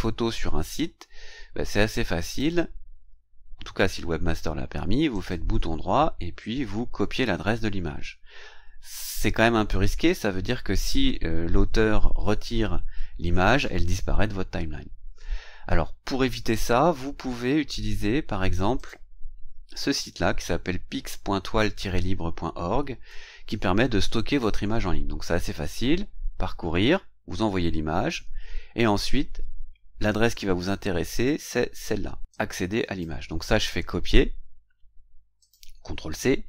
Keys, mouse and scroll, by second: 2.3 click, 3.3-4.1 scroll up 2, 5.2 right click, 18.7 click, 28.5 scroll down 1, 29.3-29.6 scroll down 1, 30.1-30.6 scroll down 1, 32.3 click, 33.6 right click, 35.4 click.